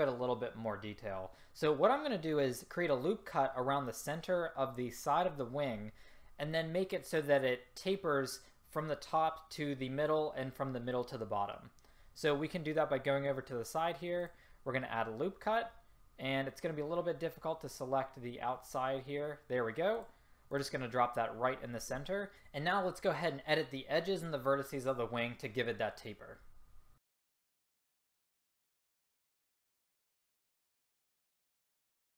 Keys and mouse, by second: 14.2-19.9 drag, 27.0 click, 29.0 ctrl+z, 30.7 ctrl+z, 30.8 ctrl+z, 31.5 click.